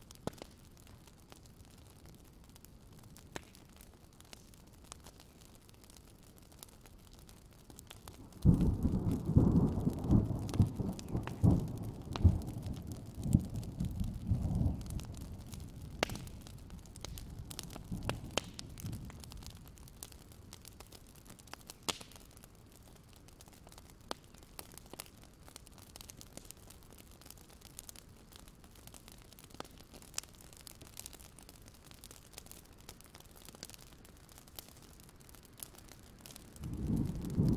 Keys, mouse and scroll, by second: 0.1 alt+scroll down 1, 0.3-1.1 scroll up 3, 1.4 click, 2.2 shift+click, 2.6 click, 3.8 click, 4.3 alt+click, 5.8-7.5 drag, 7.7 alt+scroll down 1, 8.0 alt+scroll up 1, 8.2-9.9 drag, 10.2 alt+scroll down 1, 10.8 alt+scroll down 1, 11.4 click, 12.2 scroll down 1, 12.7 scroll up 1, 13.9 ctrl+g, 14.2 scroll up 1, 14.5-14.9 ctrl+scroll down 1, 14.9 click, 15.8-16.3 ctrl+scroll down 1, 16.3 alt+click, 17.4-17.9 scroll up 1, 18.1-20.0 alt+scroll up 1, 20.0 click, 20.2-21.3 scroll down 1, 21.3 click, 21.7-22.1 scroll down 1, 23.0 alt+scroll down 1, 25.5 alt+scroll down 1, 25.7-27.5 scroll up 1, 28.1 click, 29.0-30.1 alt+scroll down 1, 30.1-32.4 scroll down 1, 32.4 click, 32.6 alt+scroll up 1, 33.3-35.4 drag, 35.8 ctrl+scroll down 1, 36.1 click.